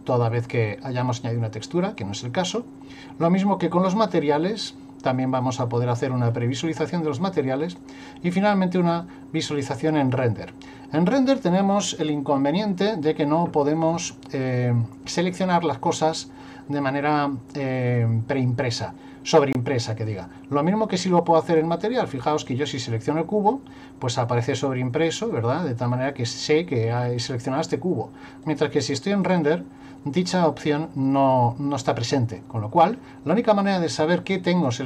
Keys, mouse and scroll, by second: 2.0 click, 6.0 middle click, 7.8 click, 20.1 click, 22.5 right click, 28.4 click, 34.7 click.